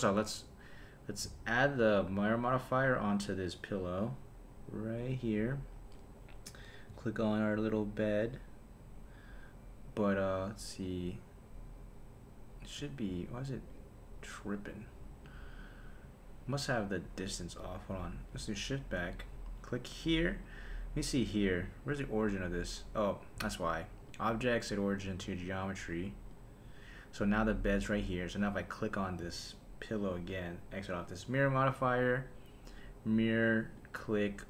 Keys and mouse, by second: 2.9 click, 3.4-5.1 drag, 5.9 click, 13.7 click, 14.5 click, 15.2 click, 16.5 click, 18.0 click, 18.6 shift+Left, 20.0 click, 24.1-26.4 drag, 28.5 click, 30.3 click, 31.0-32.9 drag, 33.8 click.